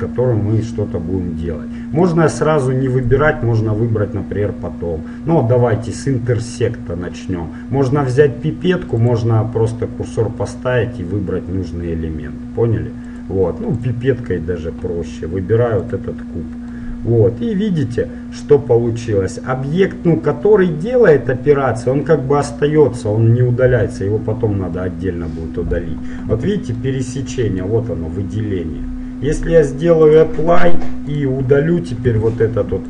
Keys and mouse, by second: 2.2-4.0 drag, 9.0-11.0 drag, 13.9-15.8 drag, 17.0-24.2 middle drag, 24.9-26.8 middle drag, 26.6 z, 27.0 middle click, 30.2-32.0 drag, 31.2-32.8 right drag, 32.2 Delete.